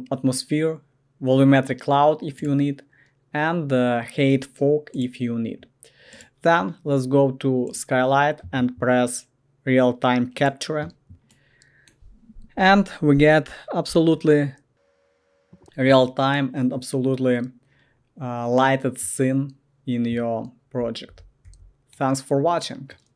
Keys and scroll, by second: 14.1-20.8 ctrl+l, 20.5-21.9 typing.